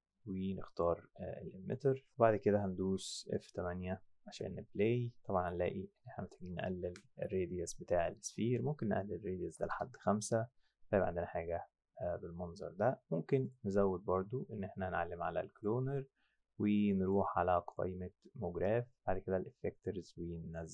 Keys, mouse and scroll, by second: 0.7 click, 2.9 F7, 4.3 F7, 6.3 click, 8.0 click, 9.5 KP_5, 9.7 KP_Enter, 13.4 click, 15.6 click, 17.0 click.